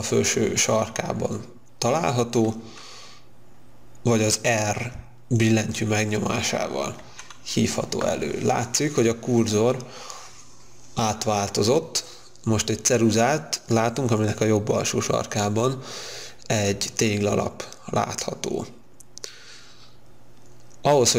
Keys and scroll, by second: 7.0 r.